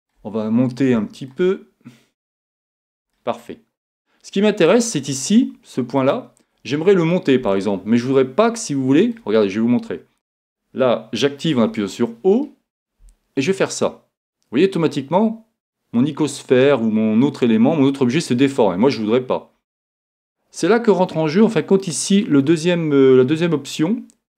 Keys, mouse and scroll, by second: 2.2-4.1 drag, 6.6-7.8 right drag, 8.2-11.6 middle drag, 11.6 o, 13.5-17.5 drag, 21.9-23.7 drag.